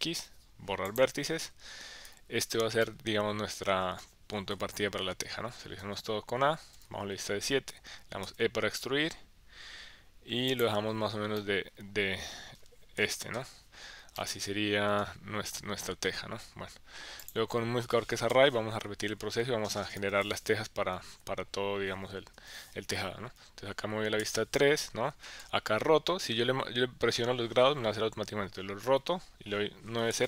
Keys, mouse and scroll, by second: 2.0 KP_7, 2.8-4.0 middle drag, 4.5 KP_1, 5.8 a, 6.7 KP_7, 8.2 e, 10.5 click, 10.9 Tab, 11.3-12.6 middle drag, 13.0 KP_Decimal, 14.2 middle click, 17.2 click, 18.3-20.8 typing, 22.3 KP_7, 23.2 KP_1, 24.2 KP_3, 28.8 r, 29.9 KP_9, 30.1 KP_0.